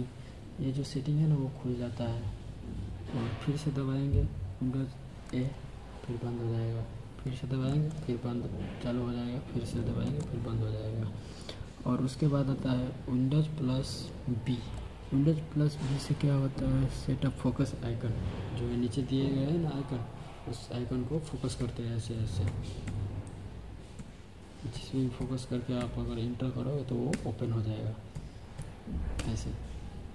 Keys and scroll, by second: 5.2 super+a, 7.5 super+a, 9.9 super+a, 14.4 super+b, 21.4 Right, 22.3 Right, 22.7 Left, 23.8 Left, 24.6 Right, 25.6 Left, 27.0 Left, 28.0 Right, 29.0 Return.